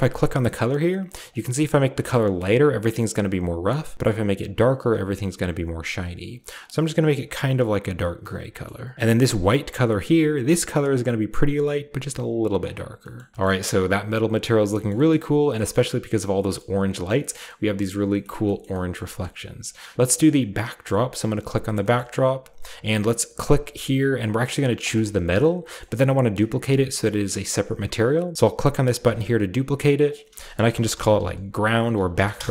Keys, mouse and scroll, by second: 0.0-1.3 drag, 0.8-1.3 scroll down 1, 6.4 click, 7.1 click, 8.0 click, 8.9 ctrl+c, 8.9 v, 9.8 ctrl+click, 10.4 click, 12.6 click, 13.3 ctrl+v, 13.3-14.7 shift+scroll up 1, 13.3 a, 13.4 shift+middle click, 14.9 shift+middle click, 14.9 shift+scroll down 1, 15.1-15.4 shift+scroll up 1, 15.4-15.9 shift+scroll down 2, 16.3-16.7 shift+scroll up 3, 16.4 shift+middle drag, 17.2 scroll down 1, 17.3 middle drag, 17.9 scroll down 1, 18.1 shift+middle click, 18.2 shift+middle drag, 18.6 shift+middle click, 18.8-19.3 scroll up 2, 18.9 shift+middle click, 19.6-20.0 scroll down 2, 20.8-23.4 middle drag, 20.8-23.4 right drag, 20.8-21.5 scroll up 1, 21.5-23.4 scroll down 1, 23.4-26.6 drag, 26.6-28.3 scroll down 1, 26.9-28.3 middle drag, 26.9 typing, 28.3 scroll down 1, 29.0-31.4 drag, 30.8-32.1 typing, 32.4 Return.